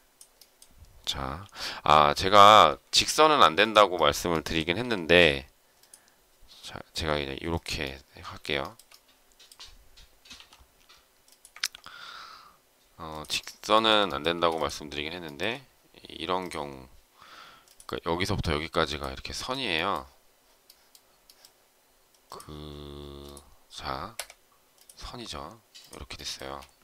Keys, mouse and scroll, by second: 1.3 m, 3.5 shift+click, 3.9 shift+middle click, 4.7 s, 8.5 shift+middle click, 10.3 m, 13.0 shift+click, 13.7 shift+middle click, 14.3 space, 15.2 shift+middle click, 19.3 space, 24.1 Escape, 26.3 space.